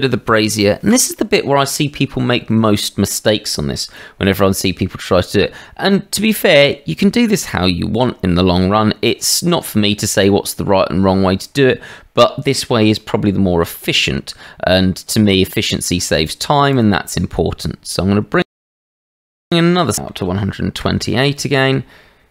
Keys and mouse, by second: 11.4 shift+middle drag, 13.7 shift+a, 19.4-21.6 drag.